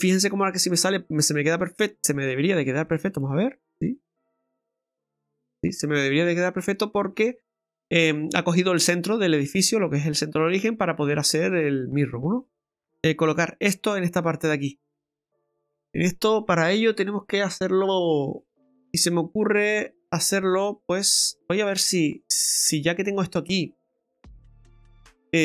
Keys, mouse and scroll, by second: 1.2 middle click, 1.8-2.4 scroll up 4, 2.5 middle click, 2.9 right click, 7.5-7.9 scroll down 4, 7.9 middle click, 10.6 middle click, 12.4 scroll down 2, 12.6 middle click, 12.9 middle click, 12.9 scroll up 5, 18.5 click, 18.5 middle click, 18.5-19.2 scroll down 2, 20.9 right click, 21.8 middle click.